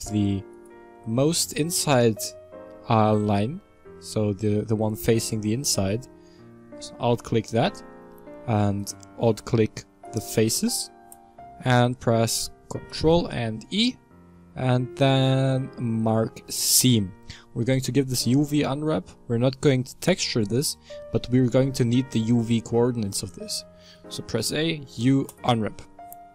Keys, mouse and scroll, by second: 0.5 alt+right click, 1.0-3.4 middle drag, 3.4-3.7 scroll up 2, 3.7-8.7 middle drag, 8.7 alt+shift+right click, 10.0 alt+shift+right click, 10.8-13.1 middle drag, 13.1 ctrl+e, 17.5 middle click, 18.0-18.8 scroll down 2, 18.8-21.8 middle drag, 22.4 middle click, 23.1 a, 24.5 u.